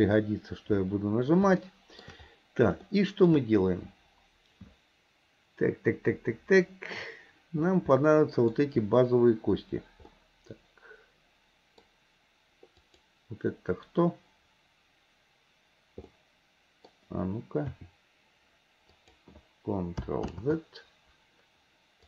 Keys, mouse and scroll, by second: 0.0 n, 1.7 shift+middle click, 2.9-3.4 shift+middle drag, 8.0-12.8 middle drag, 12.8 click, 16.2-17.8 middle drag, 17.8 r, 20.4 ctrl+z.